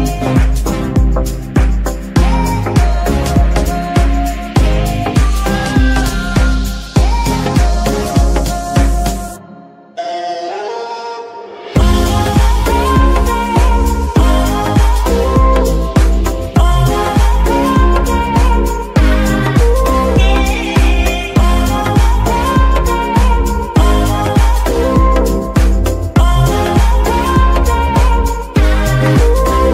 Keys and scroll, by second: 0.8 g, 1.1 Escape, 1.3 a, 3.1 g, 3.6 Escape, 4.9 r, 5.2 x, 7.1 Escape, 8.6 g, 8.7 y, 10.2 Escape, 11.9 r, 12.1 y, 14.5 Escape, 16.6 g, 17.1 Escape, 19.2 r, 19.4 x, 22.3 Escape, 25.2 r, 27.6 Escape.